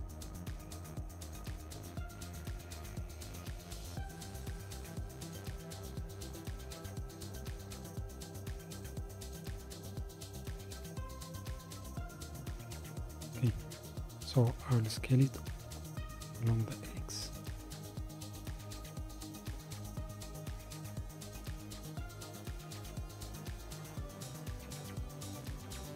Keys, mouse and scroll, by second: 1.9 s, 5.0 g, 10.5-13.0 middle drag, 12.9 KP_7, 14.0 scroll down 3, 15.4 s.